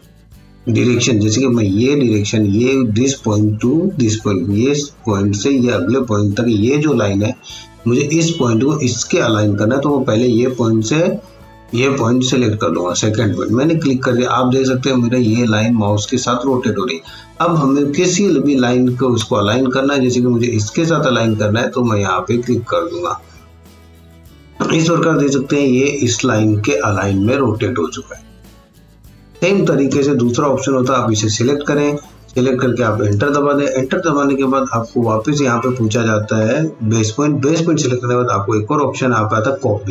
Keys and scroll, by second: 29.9 Return, 33.2 Return.